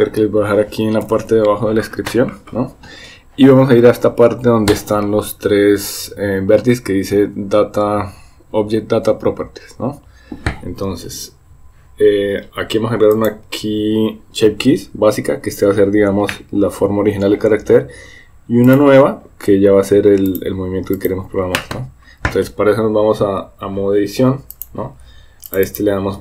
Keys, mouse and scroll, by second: 13.1 click, 18.7 click, 23.3 Tab, 24.5 click, 25.5 click, 25.7-26.2 drag.